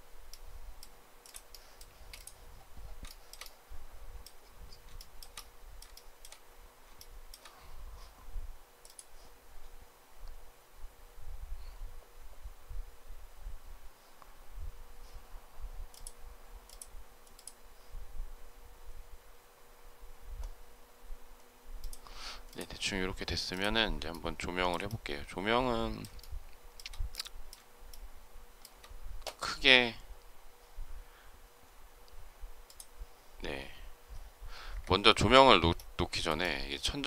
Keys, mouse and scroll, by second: 0.2 shift+middle click, 1.8 space, 3.0 shift+middle click, 4.9 shift+middle click, 5.8 shift+middle click, 6.9 shift+middle click, 24.0 shift+middle click, 26.1 shift+middle click, 27.8 shift+middle click, 34.6 Escape, 36.3 shift+middle click.